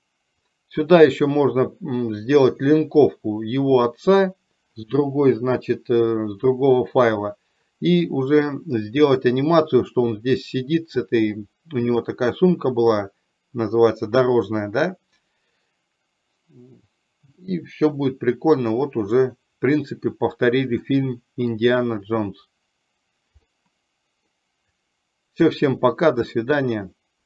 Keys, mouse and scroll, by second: 9.4 middle click, 19.4 middle click, 20.9 middle click, 23.7 middle click.